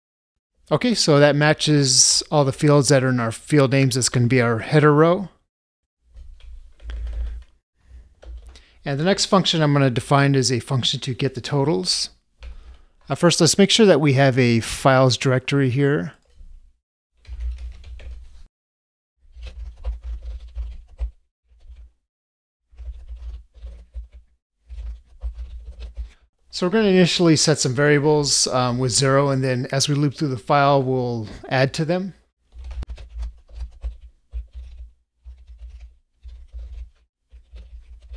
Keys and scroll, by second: 21.0 ctrl+space, 33.8 ctrl+space.